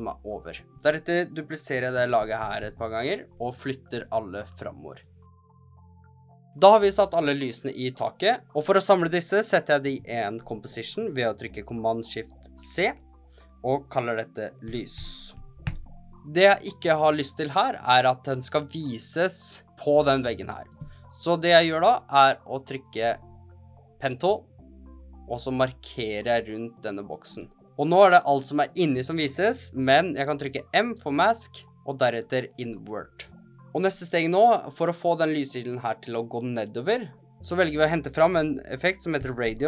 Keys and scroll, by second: 1.9 super+d, 2.1 super+d, 10.4 shift+super+c, 14.3-15.8 typing, 21.1 space, 30.8 m, 38.5-39.6 typing.